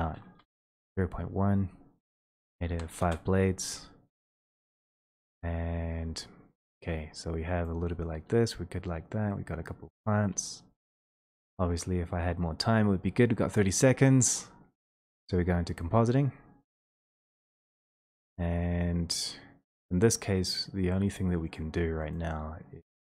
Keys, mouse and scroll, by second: 0.4 BackSpace, 2.5 click, 2.7 5, 3.0-4.1 Return, 4.5 click, 10.9 middle click, 12.2 ctrl+middle click, 13.6 click, 17.6 click, 18.6 Escape, 22.1 click.